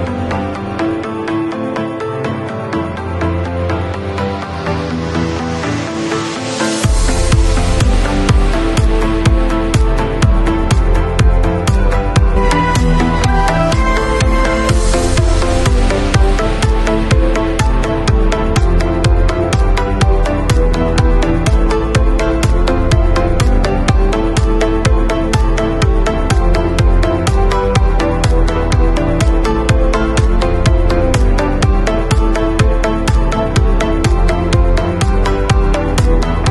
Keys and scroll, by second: 24.9 i, 27.1 alt+shift+Delete, 33.0 v.